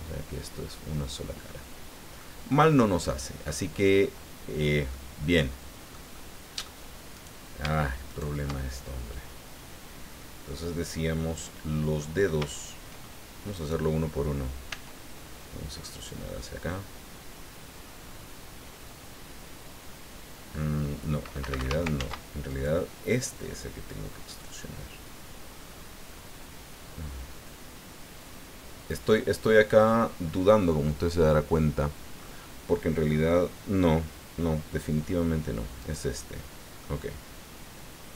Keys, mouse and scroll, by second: 2.8 click, 4.9-6.1 drag, 6.2 click, 6.2 middle click, 7.1 right click, 8.1 shift+right click, 10.2-12.1 drag, 13.5 right click, 14.7 e, 21.4 Escape, 22.0 ctrl+z, 22.5 ctrl+right click, 26.1-29.3 drag, 29.4-29.7 scroll down 1, 29.7 click, 31.2-32.3 drag, 35.8 right click, 36.4 click.